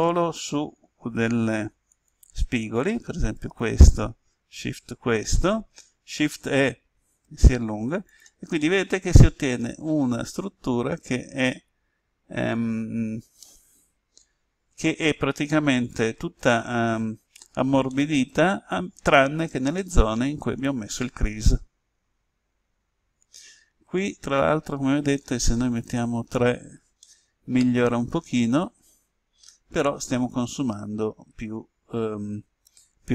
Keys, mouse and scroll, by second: 1.8 click, 4.9 shift+right click, 6.2 shift+e, 8.0 click, 8.5-23.4 middle drag, 25.7 click, 26.9-33.1 middle drag.